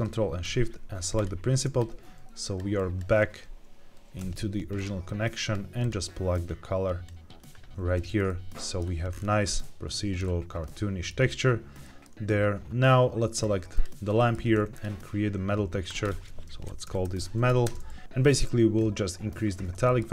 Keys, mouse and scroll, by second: 1.3 ctrl+shift+click, 1.7 click, 2.7 click, 4.1 g, 5.0 click, 5.7 drag, 6.3 click, 8.2 middle click, 8.8 scroll down 1, 9.0-9.3 scroll up 3, 9.5 middle click, 10.1-10.6 scroll down 1, 10.6-11.0 middle drag, 11.1-11.7 scroll down 2, 11.7 middle click, 13.2 click, 13.7 click, 14.1 shift+middle click, 14.7 click, 15.8-17.6 drag, 18.0 ctrl+z, 18.7 click, 19.8 shift+middle click.